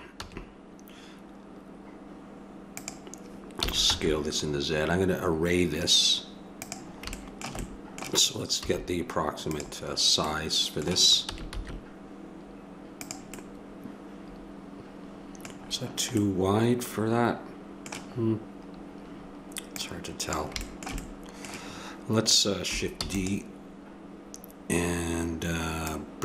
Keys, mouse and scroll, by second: 0.1 s, 3.7 s, 8.6 s, 8.8 middle click, 10.3-13.0 middle drag, 11.3 s, 13.4 middle click, 15.4 middle click, 18.2-19.7 middle drag, 19.7 click, 20.6 click, 20.8 middle click, 21.2 click, 21.5-23.0 middle drag, 23.0 shift+d, 25.8-26.2 drag.